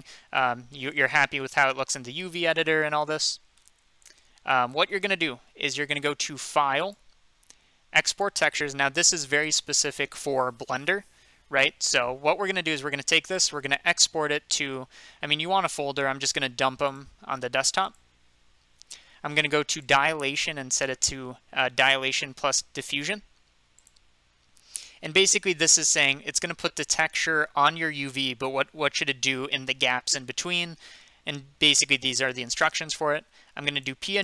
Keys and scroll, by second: 0.4 F3, 2.8 F2.